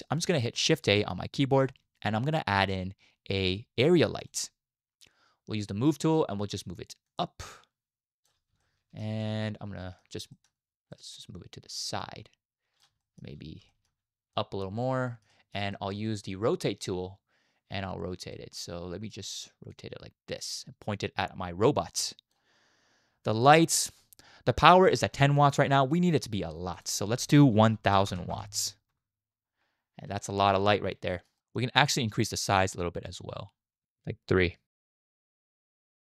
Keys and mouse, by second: 0.2 shift+middle drag, 1.4 shift+a, 7.3-8.3 drag, 8.6-9.0 shift+middle drag, 9.3-10.1 middle drag, 10.3 middle click, 10.9 middle drag, 12.0 click, 13.2 shift+middle click, 13.8 shift+middle click, 14.3 click, 15.1 shift+middle click, 15.4 middle click, 15.8 shift+drag, 16.0 shift+middle drag, 18.3 middle click, 20.0-22.3 middle drag, 26.7-29.0 middle drag, 28.0 o, 29.2 middle click, 30.2-30.6 shift+middle drag, 31.1 shift+middle drag, 31.4 middle click, 31.5 click, 31.5 right click, 32.9-34.9 right drag, 35.8 click, 35.8 right click.